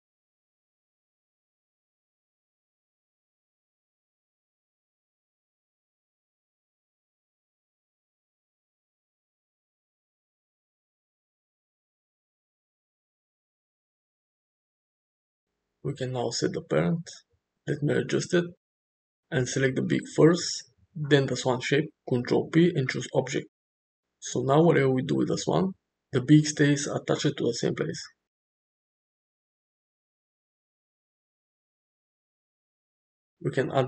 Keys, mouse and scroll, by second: 0.9 click, 2.0 shift+click, 2.9 middle click, 3.4 middle click, 5.0-5.8 middle drag, 6.7 g, 10.0 ctrl+z, 10.9 click, 11.3 shift+middle drag, 12.8 g, 14.9 middle click, 16.0 g, 17.5 g, 20.5 shift+click, 21.3 ctrl+p, 22.1 click, 22.5 click, 22.6 g, 23.8 r, 27.0 shift+middle click, 27.9 click, 28.5 g, 30.0 middle click, 33.7 click.